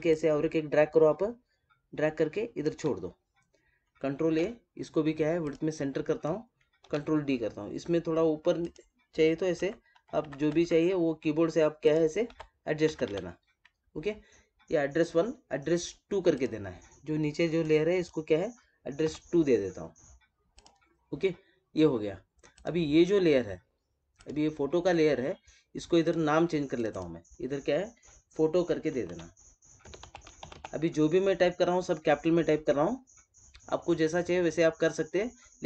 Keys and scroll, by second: 4.1 ctrl+a, 6.7 ctrl+d.